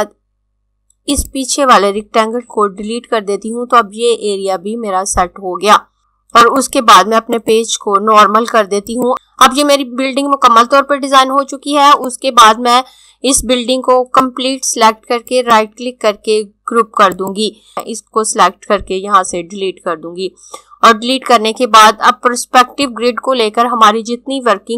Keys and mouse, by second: 2.4 Delete, 6.6 click, 12.0 click, 15.3 right click, 17.0 click, 19.4 Delete.